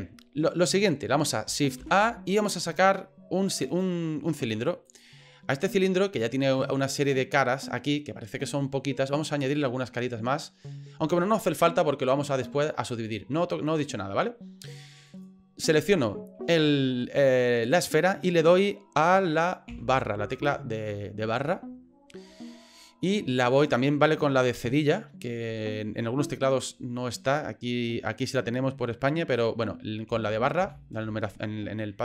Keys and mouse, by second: 1.8 shift+a, 6.1 middle click, 9.4 click, 13.7 right click, 15.1 right click, 19.7 KP_Divide, 23.1 middle click, 30.1 KP_Divide, 30.6 KP_Divide.